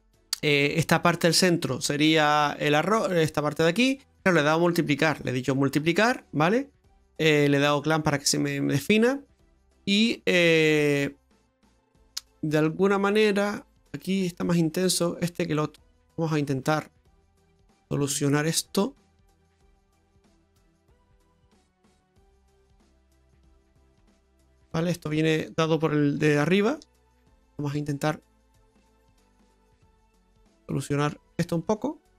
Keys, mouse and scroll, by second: 4.0-4.4 scroll down 6, 4.4 middle click, 5.8-6.3 scroll down 6, 6.1 middle click, 9.4 middle click, 12.9-14.0 scroll up 8, 13.6 middle click, 14.2 middle click, 15.5 middle click, 16.0-16.7 scroll up 8, 16.7 middle click, 17.1 middle click, 17.7 middle click, 18.8-20.0 scroll up 5, 20.7 click, 24.5-25.0 scroll down 5, 25.0 middle click, 26.3 shift+middle click, 27.7-28.4 scroll up 4, 28.6-29.2 scroll up 2, 29.2-29.7 scroll down 4, 29.7 middle click, 30.1-30.9 scroll up 8, 31.3 click.